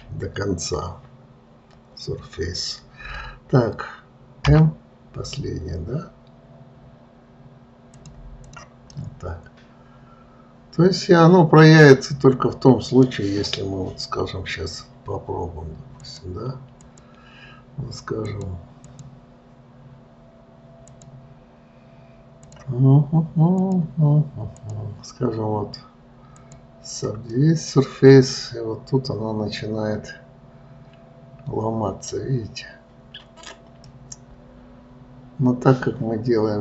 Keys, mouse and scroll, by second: 8.8 click, 9.3-12.3 middle drag, 13.5-14.2 scroll down 2, 16.4 click, 17.2 click, 18.5 click, 21.3-22.9 drag, 23.9 click, 24.9-27.7 drag, 27.7-30.7 middle drag, 34.2-36.6 middle drag.